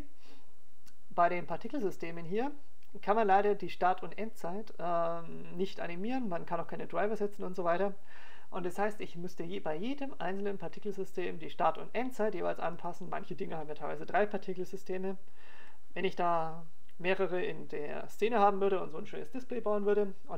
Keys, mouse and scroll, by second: 2.6 click, 3.3 click, 13.9 click.